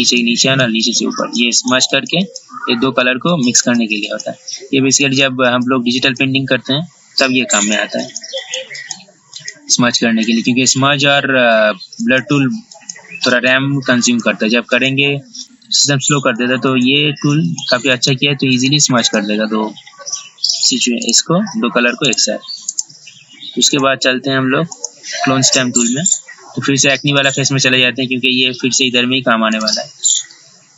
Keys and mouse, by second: 21.2 right click, 23.9 click, 29.7 right click.